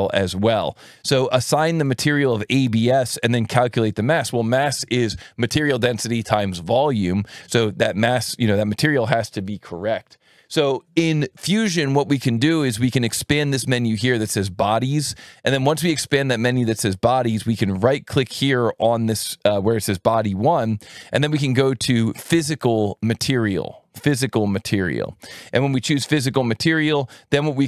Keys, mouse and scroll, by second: 0.3 click, 1.4 ctrl+shift+click, 3.4 click, 7.4 alt+1, 9.2-10.8 drag, 14.3 click, 20.2 right click, 25.3 click.